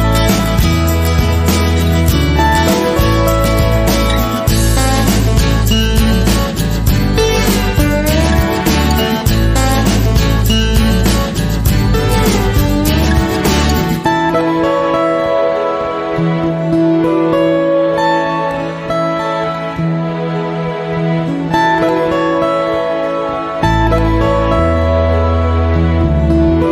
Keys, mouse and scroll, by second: 0.0 ctrl+r, 0.6 click, 1.9 s, 2.3 right click, 3.0 s, 3.8 click, 4.6 click, 5.0 click, 5.3 g, 5.8 click, 5.9 ctrl+r, 6.8 click, 8.0 s, 8.6 middle click, 11.7 scroll down 1, 11.8-15.6 middle drag, 12.5 ctrl+z, 13.1-13.6 scroll down 4, 13.2 ctrl+z, 13.6 ctrl+z, 13.9-14.3 scroll up 4, 14.1 KP_1, 18.9 shift+middle click, 22.4 right click, 22.4 scroll down 2, 22.6 scroll up 2, 22.6-23.8 middle drag.